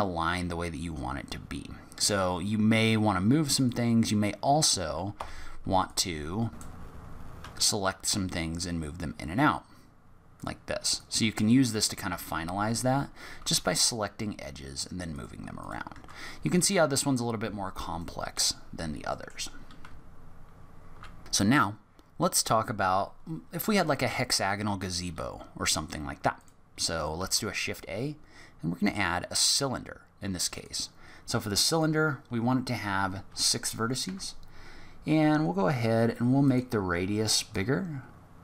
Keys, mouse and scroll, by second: 5.1 2, 5.8 click, 6.7 Tab, 6.8 2, 6.9 click, 7.1 g, 10.9 click, 12.1 g, 15.5 click, 15.9 Tab, 16.7 middle click, 17.9 middle click, 18.8 scroll down 1, 19.1 middle click, 19.8 z, 24.2-26.3 scroll down 1, 26.3 click, 27.1 shift+a, 31.7 click, 37.5 click.